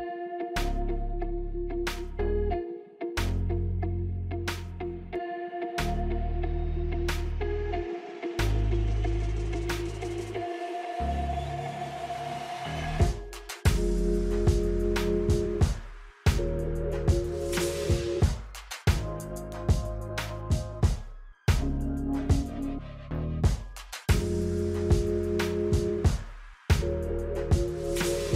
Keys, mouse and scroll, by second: 2.9 scroll down 1, 3.6 alt+scroll down 1, 5.2-7.7 drag, 7.7 Caps_Lock, 7.7 click, 20.9 click, 25.0-28.3 drag.